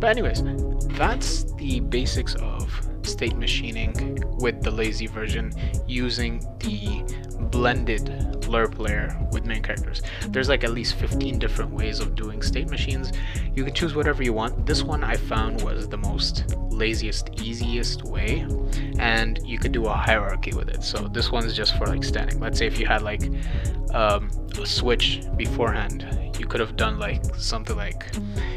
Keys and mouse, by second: 28.1 click.